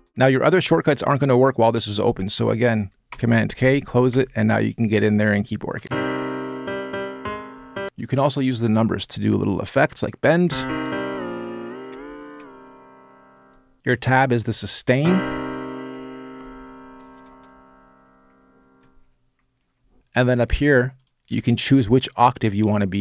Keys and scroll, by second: 0.0-0.6 typing, 2.9 super+k, 3.9 e, 5.6 space, 10.0-12.2 typing, 13.8 Tab, 14.5-15.3 typing, 15.6 Tab, 15.6 Tab, 16.5 Tab, 16.6 Tab, 17.4 Tab, 17.5 Tab, 18.3 Tab, 18.4 Tab, 22.9-23.0 typing.